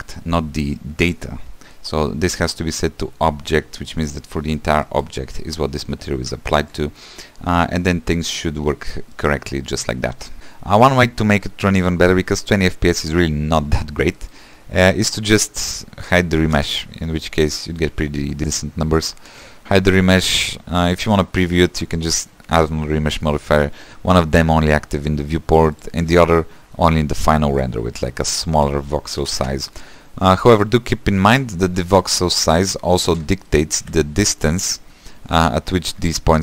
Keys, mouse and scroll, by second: 3.9 middle click, 4.2-4.9 scroll down 3, 4.9 middle click, 5.3-8.3 scroll up 1, 8.3-9.4 middle drag, 9.4-10.3 scroll down 1, 10.3 scroll down 2, 10.4 click, 13.6 space, 14.2-16.2 shift+middle drag, 16.2 click, 16.6 space, 17.7 middle click, 17.9 =, 18.4 =, 19.2 space, 19.9 click, 20.8 click, 21.8 shift+d, 24.4 click, 25.8 click, 29.5-31.4 drag, 31.9 shift+middle click, 32.3-32.6 scroll up 3, 32.6 space, 33.1 space, 33.3 shift+middle click, 33.9 =, 34.8 click, 35.1 =, 35.3 =, 35.6-35.9 scroll up 2, 35.9-36.4 middle drag.